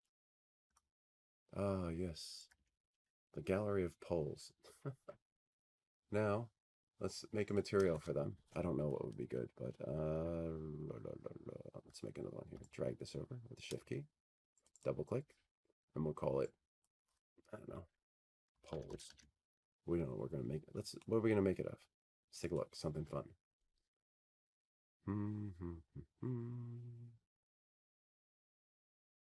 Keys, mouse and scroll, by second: 3.1 click, 4.0 c, 6.3 F3, 8.1 click, 13.3 click, 16.6-19.2 scroll, 19.2 shift+click, 19.2 scroll, 20.3 click, 20.6 click, 22.6 click, 23.9-25.2 typing, 26.6 click, 28.1 click.